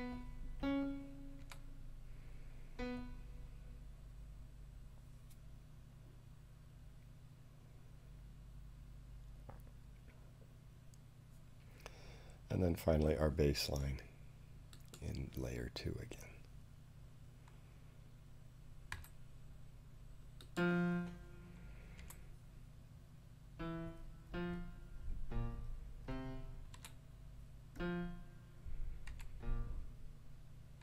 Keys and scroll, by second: 1.4 6, 18.9 5, 21.9 4, 26.7 5, 29.1 4.